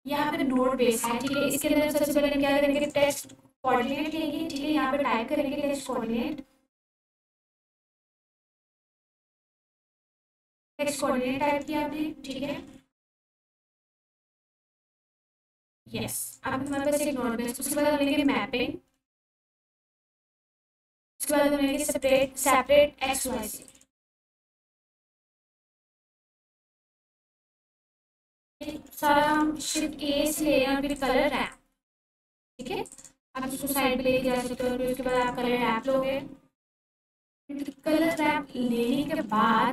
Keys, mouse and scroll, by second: 2.7 click, 3.6 shift+s, 6.8 click, 9.1 shift+a, 9.7 click, 11.1-15.0 typing, 16.2 click, 17.5 shift+a, 18.0 click, 19.0-20.6 typing, 21.7 click, 23.1 shift+s, 23.6 click, 27.4-29.7 typing, 27.8 click, 30.9 click, 32.0 g, 32.5 click, 34.4 shift+a, 35.1 click, 36.4-39.7 typing.